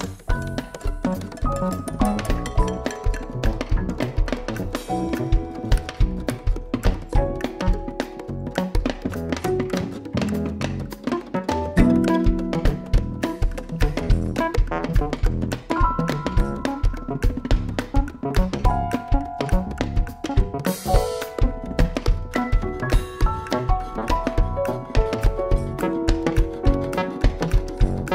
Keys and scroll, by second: 17.0 x, 17.9 shift+c, 19.6 shift+c, 23.3 ctrl+r, 23.7 ctrl+r, 23.9 ctrl+r, 27.4 x, 27.6 shift+c, 27.9 shift+c.